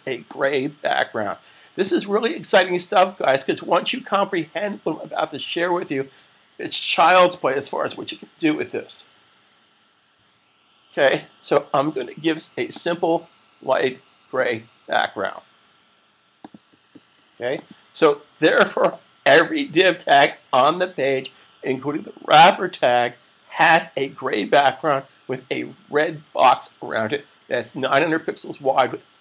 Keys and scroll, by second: 18.4 super+s.